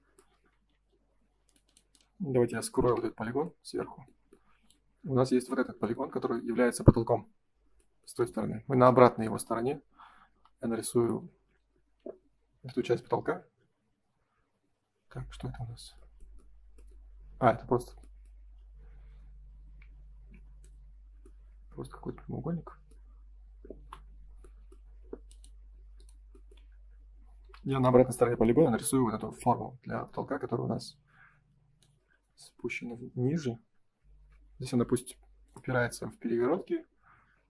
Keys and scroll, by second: 19.7 Escape, 20.1 space, 20.3 Escape, 23.7 Delete.